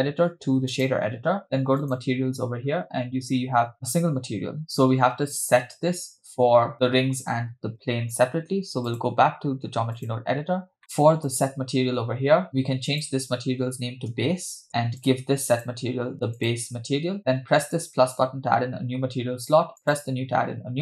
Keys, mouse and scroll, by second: 1.8 click, 2.7-4.1 scroll up 2, 8.9-10.2 drag, 10.8 middle click, 11.3 click, 12.9-14.7 drag, 14.7 middle click, 14.7 scroll down 2, 15.0 click, 15.6-16.7 drag, 17.8 drag, 19.8-20.3 drag.